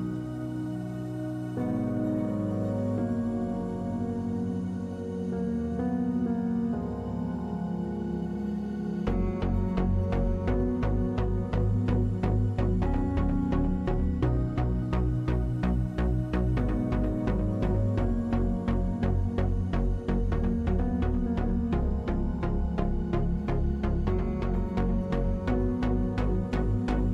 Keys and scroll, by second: 6.2 \, 7.4 x, 12.3 l, 16.9 \, 18.4 m, 23.4 \.